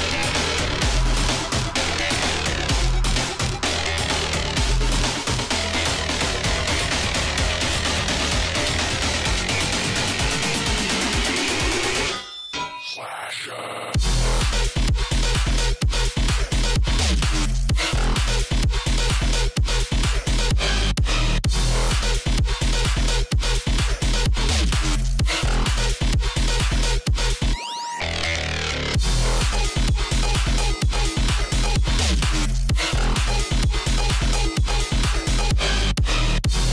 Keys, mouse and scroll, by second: 0.0 alt+scroll down 1, 1.3-3.6 drag, 3.6 alt+scroll down 1, 3.6-6.1 drag, 6.1 right click, 7.9 click, 8.6 alt+scroll up 1, 8.7 click, 9.4 alt+scroll down 1, 9.5-13.6 drag, 13.6 click, 14.9-16.8 drag, 16.9 click, 18.7 alt+scroll up 1, 19.4 alt+scroll down 1, 19.6 alt+scroll up 1, 20.3 click, 20.9 l, 21.4 click, 24.2 alt+scroll up 1, 25.9 alt+scroll up 1, 26.0 scroll down 1, 26.3 scroll up 1, 26.4 click, 27.1 right click, 27.4 click, 28.2 space, 34.0 click, 34.9-35.5 alt+scroll up 1.